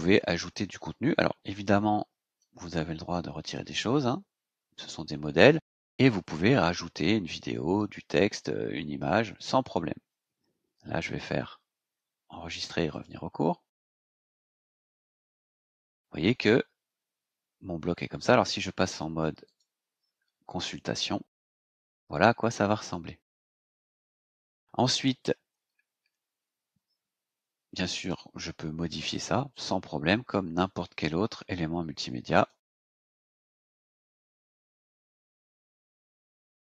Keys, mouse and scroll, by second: 2.3-3.7 drag, 4.2 BackSpace, 10.7 scroll down 2, 11.5-11.8 scroll down 2, 12.9 click, 14.5-15.6 scroll down 6, 19.4 click, 20.7-21.3 scroll down 2, 21.7 scroll down 2, 22.7 scroll down 2, 25.1 scroll up 2, 27.3 scroll up 2, 27.9 click, 28.9 click, 30.5-31.1 scroll down 4, 32.3 click, 34.4 click.